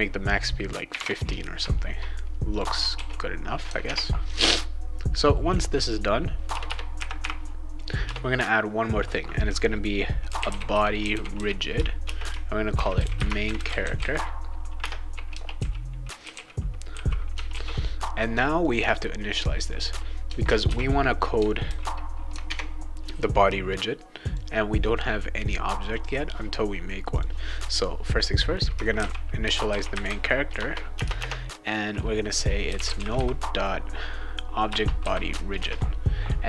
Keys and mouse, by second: 2.5 click, 2.9 ctrl+s, 3.8 alt+Tab, 5.6 click, 6.5 Return, 6.7 Return, 7.7 click, 8.0 Return, 10.0-16.9 typing, 17.5 ctrl+s, 18.6 click, 18.8 click, 19.7 click, 20.6 ctrl+d, 21.7 ctrl+z, 22.5 alt+Tab, 24.2 click, 27.1 click, 28.7-31.0 typing, 32.4-33.6 typing, 34.6 Return, 35.0 ;, 35.6 ctrl+s.